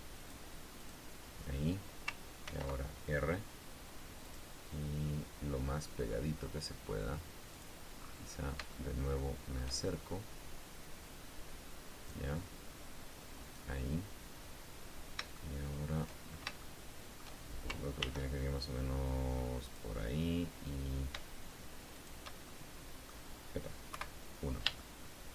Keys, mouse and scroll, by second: 0.5 click, 1.1 click, 2.8 ctrl+r, 4.6 click, 7.9 click, 8.3-8.9 scroll up 2, 8.9 shift+scroll up 1, 9.1-10.1 shift+middle drag, 12.4-14.1 drag, 14.9 scroll down 1, 15.7 shift+middle click, 16.9 shift+middle click, 18.3 ctrl+r, 20.0 click, 22.3 shift+click, 22.8 shift+click, 24.3 KP_1, 25.1 shift+middle click.